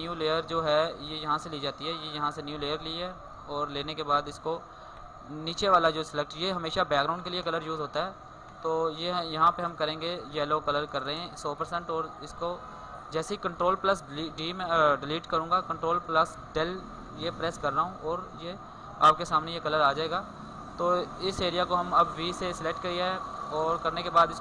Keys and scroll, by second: 17.0 ctrl+Delete, 21.9 ctrl+d.